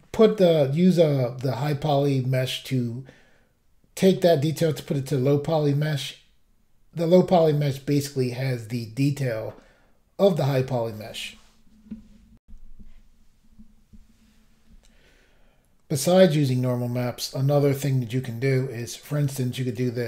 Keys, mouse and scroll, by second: 12.4 Pause, 12.4 Insert, 15.4-15.8 scroll down 1, 19.0 click, 19.7 click, 19.7 click.